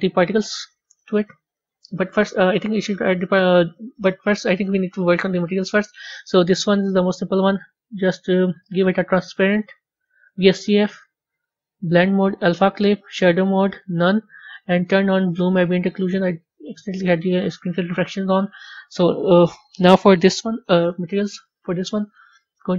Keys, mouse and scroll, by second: 2.2 click, 6.6 click, 7.5-7.8 drag, 8.6-14.7 drag, 15.8 click, 18.2 click, 22.0 click.